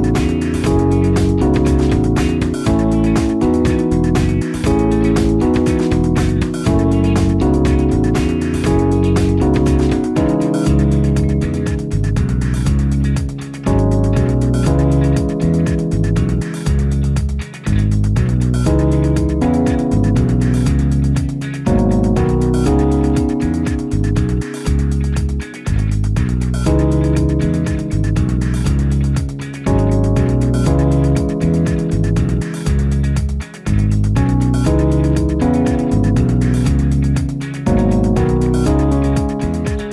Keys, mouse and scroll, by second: 13.8 ctrl+c, 17.2 ctrl+v, 18.8 m, 35.1 0.